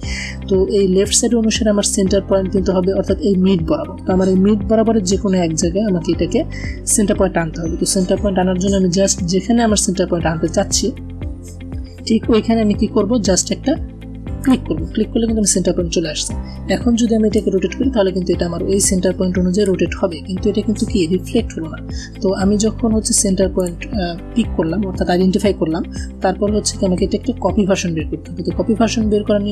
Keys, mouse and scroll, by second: 14.3 click, 17.3-19.7 drag, 20.6 ctrl+z, 23.4 click.